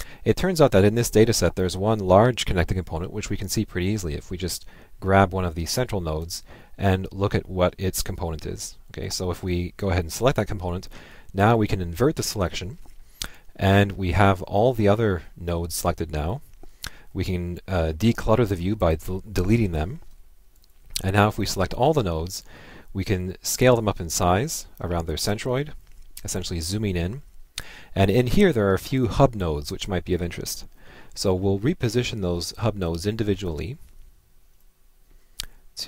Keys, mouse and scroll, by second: 6.2-9.1 drag, 9.5 Left, 11.4 Left, 11.7 click, 20.5 click, 20.7 Left, 33.5 ctrl+Left.